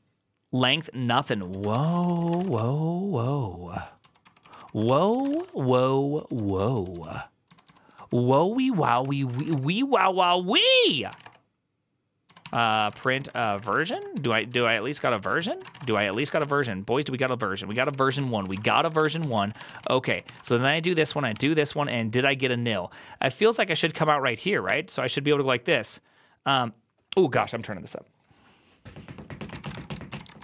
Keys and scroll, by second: 1.4 ctrl+a, 1.6-9.8 typing, 1.8 ctrl+c, 1.9 ctrl+c, 4.7 ctrl+c, 8.9 ctrl+c, 10.7 ctrl+c, 10.7 Return, 11.0-16.0 typing, 11.1 Return, 16.0 ctrl+c, 16.2 Up, 17.6 ctrl+a, 17.8-21.8 typing, 18.0 ctrl+c, 18.2 ctrl+c, 21.2 ctrl+c, 23.1 typing, 24.5 typing, 29.5-30.4 typing.